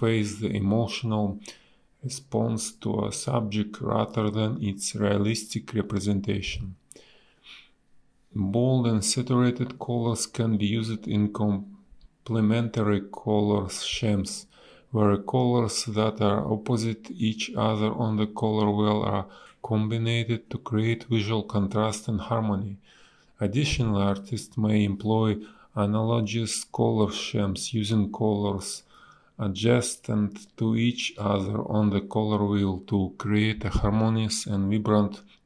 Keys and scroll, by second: 2.5 space, 2.6 b, 4.0 ctrl+z, 5.9 space, 7.7 space, 10.8 space, 12.2 ctrl+z, 14.2 space, 18.1 space, 22.0 a, 24.2 ctrl+z, 26.6 space, 29.6 space.